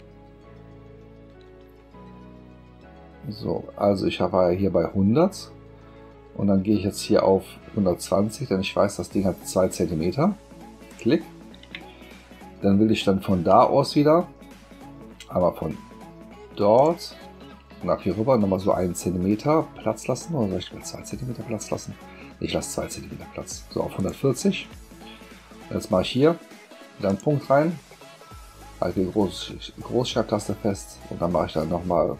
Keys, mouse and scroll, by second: 10.9 shift+click, 16.7 click, 18.7 shift+click, 24.0 shift+click, 27.1 click.